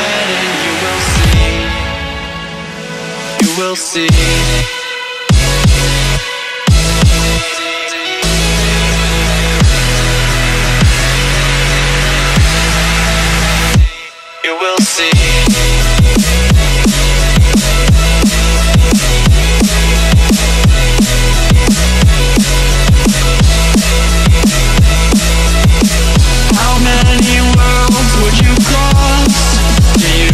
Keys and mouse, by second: 1.6 click, 3.3 space, 3.5 click, 3.7 space, 4.6 click, 6.8 ctrl+c, 7.3 click, 10.2 ctrl+a, 11.0 click, 13.8 ctrl+c, 14.4 click, 17.8-24.0 drag, 26.8 ctrl+c, 27.7 click.